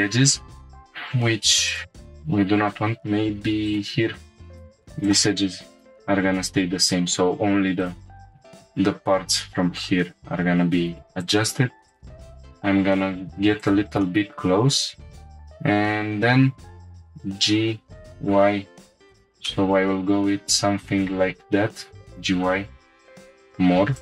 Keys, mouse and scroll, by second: 0.7 click, 1.6 ctrl+click, 3.5 1, 3.6 click, 4.6 ctrl+shift+z, 4.6-6.0 shift+drag, 7.8 right click, 11.2 click, 11.9 ctrl+click, 12.2 g, 12.3 g, 13.6 click, 14.0 middle click, 14.8-15.3 scroll up 3, 17.0 g, 18.0 y, 19.1 shift+click, 19.4 middle click, 19.9-20.9 drag, 21.6 g, 21.8 y, 23.9 shift+click.